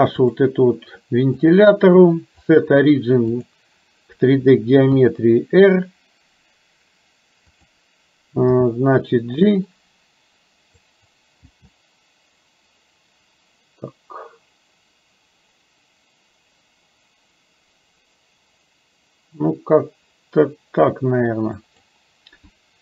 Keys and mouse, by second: 1.6-3.6 drag, 4.9 r, 8.6 g, 11.6 g.